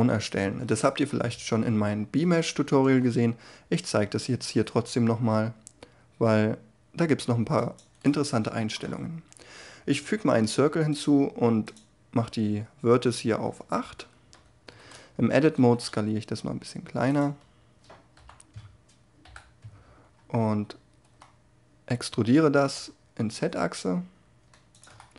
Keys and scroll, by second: 0.0 shift+a, 14.2 Tab, 15.5 s, 18.1 3, 19.2 ,, 21.0 e, 22.6 z.